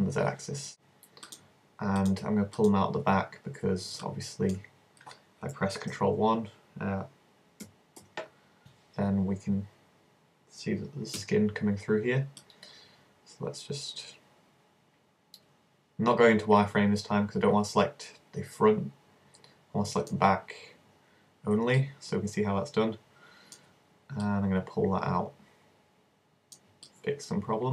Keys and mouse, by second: 0.7 click, 1.5-3.1 shift+right drag, 5.9 alt+KP_1, 8.0 ctrl+KP_1, 11.2 c, 21.8 middle click, 24.3-26.0 drag, 26.0-27.7 middle drag.